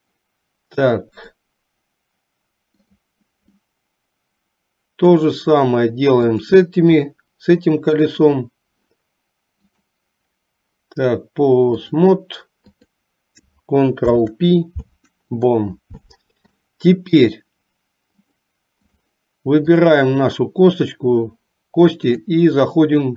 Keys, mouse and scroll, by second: 1.3-3.1 drag, 3.6-5.4 middle drag, 6.4 click, 9.8-12.1 drag, 12.7 click, 14.0 ctrl+p, 16.8 middle click, 18.3 click, 19.9 click, 22.2-23.1 drag.